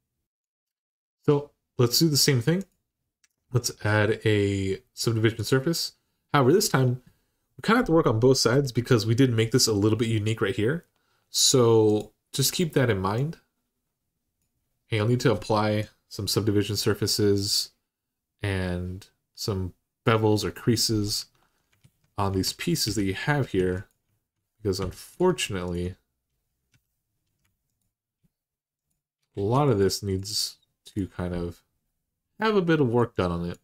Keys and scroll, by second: 21.0 Tab, 21.6 alt+z, 22.6 2, 23.2 1, 24.6 2, 26.5 2, 29.1 alt+z.